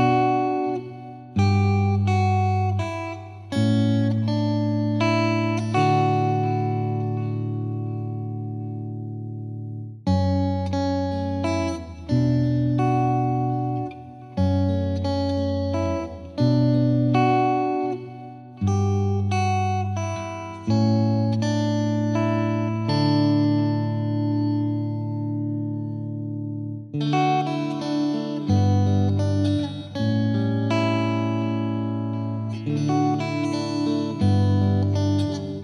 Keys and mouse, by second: 0.0 click, 0.4 F2, 0.8 click, 2.5 click, 3.4 click, 3.4 click, 4.3 click, 4.4 click, 4.7 click, 4.7 click, 5.1 click, 5.1 click, 5.4 click, 5.5 click, 5.9 click, 7.3 click, 7.5 click, 7.7 ctrl+z, 7.8 ctrl+z, 8.2 Delete, 8.8 click, 9.4 click, 9.5 click, 10.2 click, 10.8 click, 11.3 click, 11.9 click, 12.1 click, 12.4 click, 12.7 click, 14.4 click, 14.9 click, 15.0 ctrl+z, 15.6 ctrl+z, 16.4 click, 16.9 click, 17.7 click, 18.3-20.0 drag, 20.3 click, 21.2 click, 22.5 click, 23.1-24.1 drag, 24.2 ctrl+z, 25.9 click, 28.6 click, 29.0 click, 29.5 click, 30.5 click, 31.9 click, 32.7 click, 33.5 click, 33.8 click, 34.9 click.